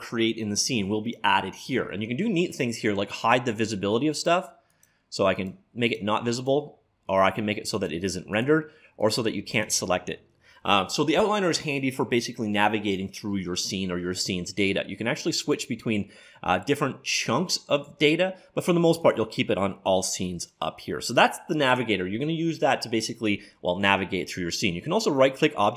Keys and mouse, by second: 4.7-11.4 drag, 15.4-17.3 drag.